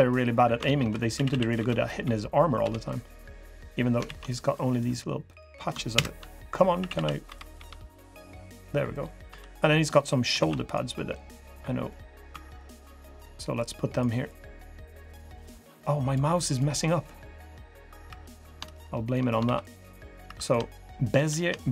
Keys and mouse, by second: 0.4 ctrl+z, 0.9 a, 1.0 a, 1.3 b, 2.4 g, 3.8 ctrl+z, 5.7 ctrl+KP_Add, 6.5 a, 6.7 a, 7.0 b, 7.3 g, 8.7 click, 9.0 3, 10.1 ctrl+r, 11.6 click, 12.0 2, 17.8 3, 19.2 ctrl+r, 20.0 3, 21.3 shift+drag.